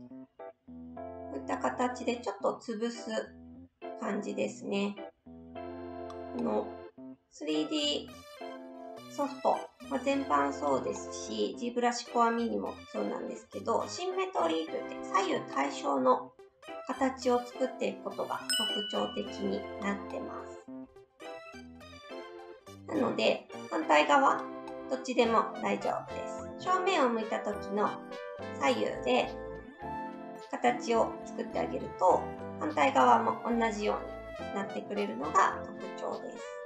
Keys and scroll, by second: 34.8 ctrl+z, 35.7 ctrl+z.